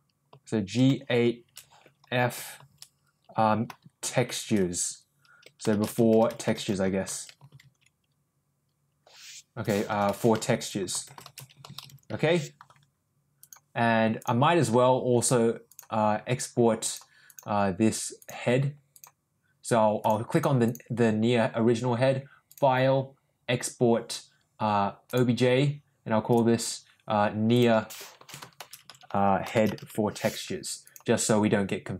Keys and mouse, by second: 17.2 click, 18.2 click, 18.9 click, 19.9 click, 20.3 click, 20.6 click, 22.4-25.2 drag.